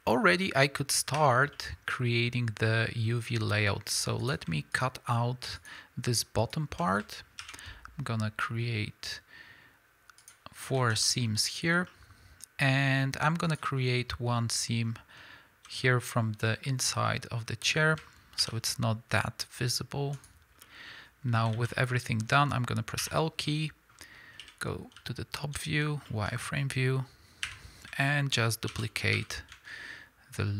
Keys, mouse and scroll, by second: 1.2 2, 1.7 middle click, 3.0-4.2 middle drag, 3.0 scroll up 1, 3.7 scroll up 1, 4.2 click, 4.7 shift+click, 5.6 shift+click, 6.4 shift+click, 7.4 ctrl+e, 10.8 alt+a, 11.0-13.5 middle drag, 13.5 click, 13.8 scroll down 1, 14.0-24.9 middle drag, 15.0 scroll up 1, 15.2 z, 18.4 ctrl+e, 20.5 scroll down 1, 21.5 alt+a, 23.0 l, 24.4 KP_7, 25.6 z, 26.1 shift+middle click, 27.4 1, 28.7 shift+d.